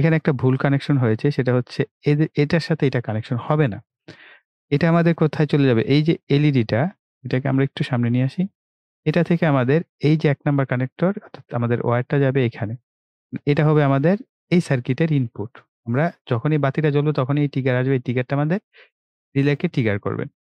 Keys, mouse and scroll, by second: 0.2 right click, 1.9 click, 3.2 Delete, 6.3-8.9 drag, 11.9 click.